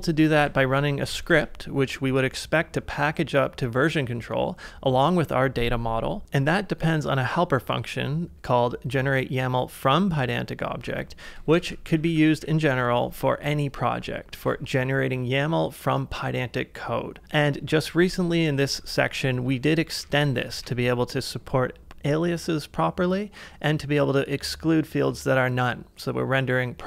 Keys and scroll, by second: 0.4 ctrl+w, 1.1 k, 2.5 ctrl+w, 2.5 Return, 6.2 ctrl+w, 10.4-12.4 typing, 13.8 shift+v, 14.4 ctrl+c, 17.2 typing, 19.3-21.0 typing.